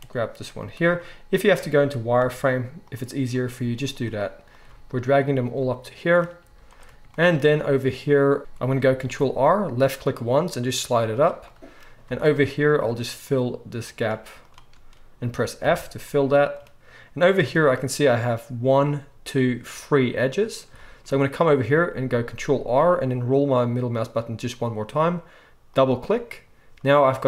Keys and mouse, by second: 0.5 z, 2.2 g, 3.5 g, 3.6-7.1 middle drag, 4.6 g, 6.4 z, 7.1-8.4 shift+drag, 8.4 ctrl+z, 8.4-13.8 ctrl+middle drag, 9.0 ctrl+r, 12.1 alt+a, 13.8 shift+click, 14.7-22.7 middle drag, 15.6 f, 22.2 ctrl+r.